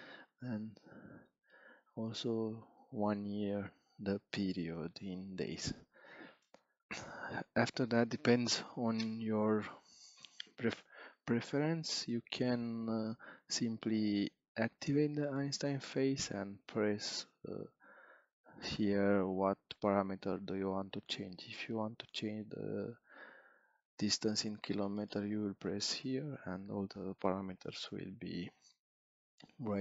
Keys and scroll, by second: 2.3 3, 3.0 6, 4.1 5.